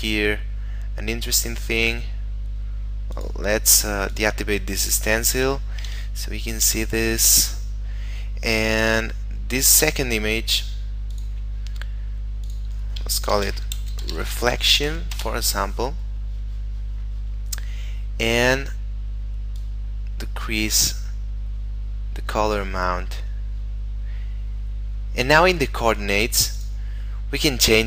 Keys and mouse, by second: 3.1 click, 5.5 F12, 6.7 Escape, 11.1 click, 13.3-14.9 typing, 15.2 Return, 16.3 middle click, 19.6 click, 23.4 middle click, 26.6 click.